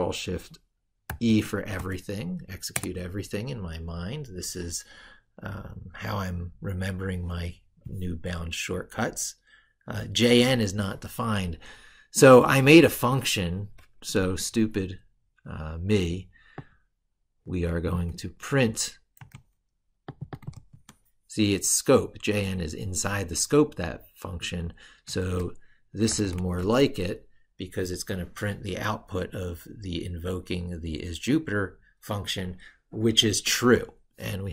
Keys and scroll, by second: 0.9 ctrl+shift+e, 19.0 ctrl+c, 20.4 ctrl+v, 25.9 ctrl+shift+e.